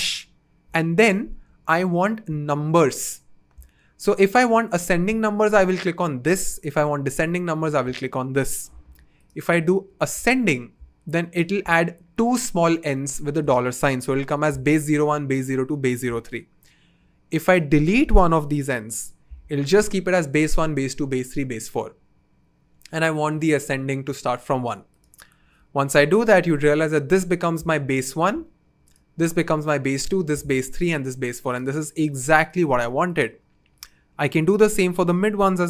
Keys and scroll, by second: 18.7 BackSpace.